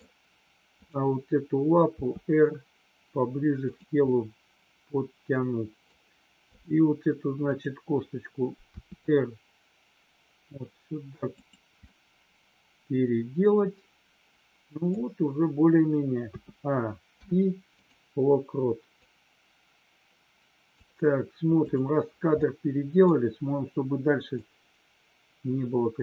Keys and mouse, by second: 0.7-1.5 drag, 2.0 r, 4.1-6.0 middle drag, 6.5 click, 7.5 click, 8.6 r, 11.3 click, 11.9-14.9 middle drag, 17.1 i, 19.0-20.9 drag, 21.6 click, 22.2-23.0 middle drag, 24.3-26.0 drag.